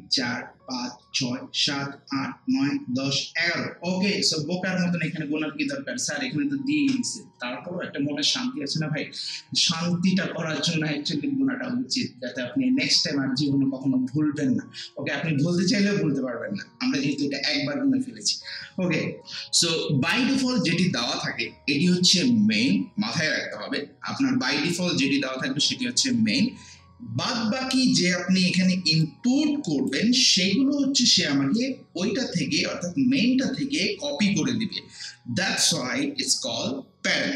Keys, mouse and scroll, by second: 29.0-33.9 drag.